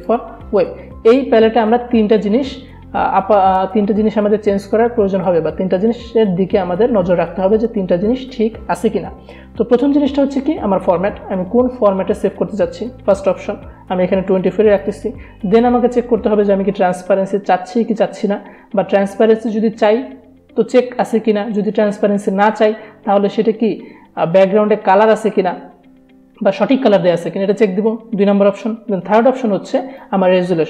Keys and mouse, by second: 12.6 click, 30.0 click, 30.1 click.